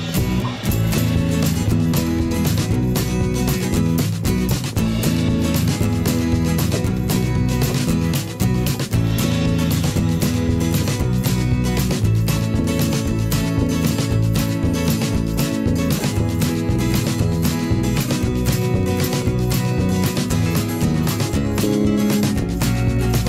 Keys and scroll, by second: 0.8 v.